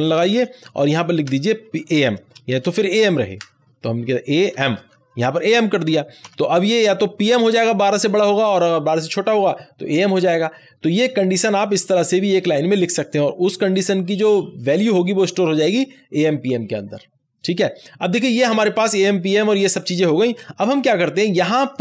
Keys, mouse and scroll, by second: 0.3 shift+;, 1.2 space, 2.5 shift+', 4.0 shift+a, 4.5 shift+m, 5.2 Right, 6.1 ;, 11.7 ;, 11.7-19.7 drag, 20.5 click.